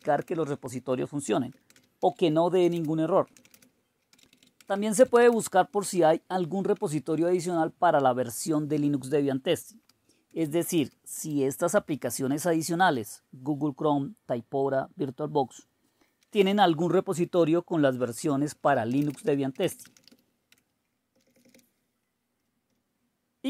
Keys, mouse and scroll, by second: 0.0-6.3 typing, 6.7 Return, 7.5 Down, 7.9 Delete, 8.4 Delete, 8.6-9.4 typing, 10.4 ctrl+o, 10.6 Return, 11.2 ctrl+x, 12.0 Up, 12.4 Up, 12.9 Return, 16.0-17.1 typing, 18.3-20.6 typing, 21.1 Down, 21.2 Page_Down, 21.3 Down, 21.4 Down, 21.5 Down, 22.4 Delete, 22.7 Delete.